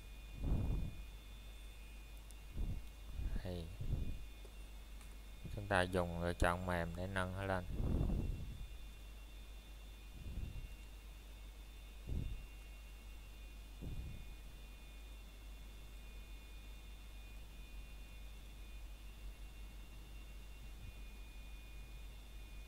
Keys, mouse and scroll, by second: 5.0 ctrl+click, 5.2 ctrl+f, 7.0 click, 14.5 scroll down 1, 17.3 scroll up 1, 17.6 middle click, 18.6 scroll up 1, 19.7 click, 20.0 scroll down 1, 20.4 middle click, 21.5 scroll up 1, 21.9 middle click.